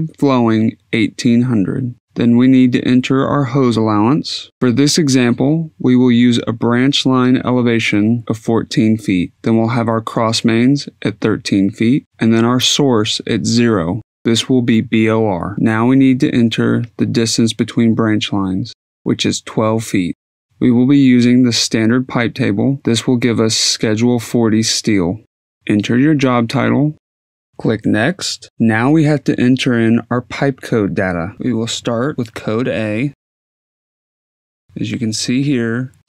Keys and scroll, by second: 0.0-3.1 typing, 0.3 Tab, 1.6 Tab, 4.8-5.8 typing, 7.9-8.9 typing, 9.9 Tab, 10.5-11.4 typing, 12.0 Tab, 20.4-21.3 typing, 25.8-27.7 typing.